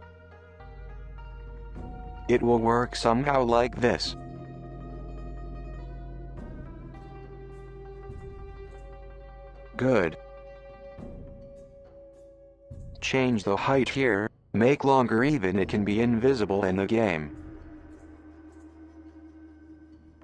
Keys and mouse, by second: 11.6 Tab, 12.3 alt+click, 13.0 g, 16.4 Tab, 17.2-18.4 middle drag, 19.2-19.6 middle drag, 19.7 middle drag.